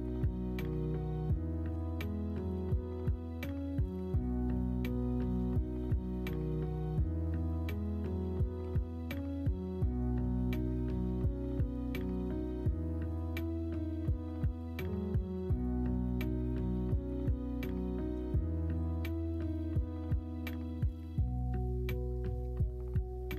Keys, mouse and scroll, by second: 0.1 alt+z, 1.0 middle click, 1.2 Tab, 1.7 Tab, 2.5 Tab, 3.1 click, 3.7 middle click, 4.0 Tab, 4.9 KP_1, 5.1 KP_3, 5.6 alt+z, 8.6 2, 11.4 e, 15.8 3, 18.8 p, 19.8 Tab, 23.0-23.3 ctrl+z.